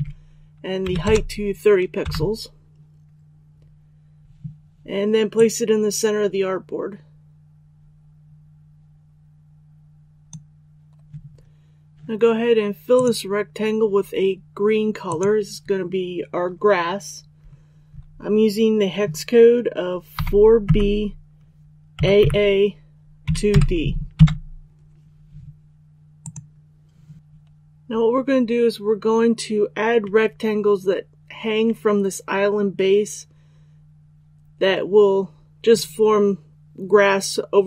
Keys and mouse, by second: 0.8 KP_3, 5.3-10.4 drag, 20.1-20.6 typing, 21.6-23.4 typing, 26.2-37.6 drag.